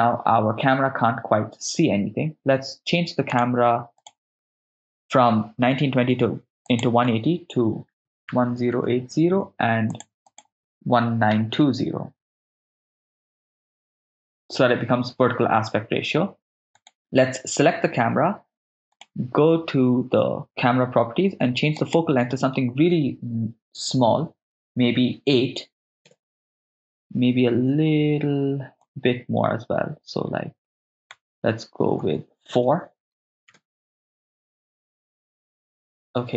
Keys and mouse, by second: 3.3 click, 4.0-13.9 drag, 8.0 1, 8.0 0, 11.5 BackSpace, 11.6 BackSpace, 16.8 click, 16.8 right click, 18.9 click, 21.8-26.1 drag, 28.8-33.7 drag, 32.6 BackSpace.